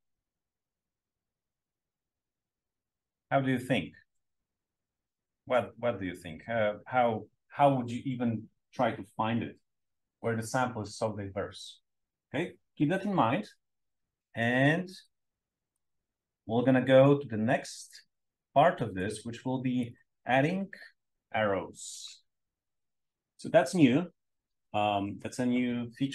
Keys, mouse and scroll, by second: 0.5 click, 1.1 click, 5.2 click, 5.4 click, 14.8-17.0 drag, 18.0-18.9 drag, 19.7 click.